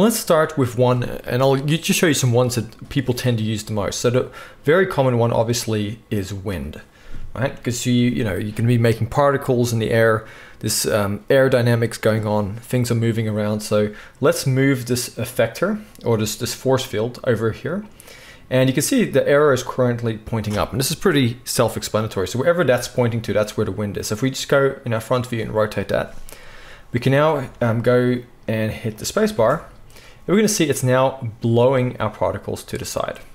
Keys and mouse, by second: 13.7 g, 22.7 r, 28.9-33.3 drag, 28.9-33.3 middle drag, 29.3 space.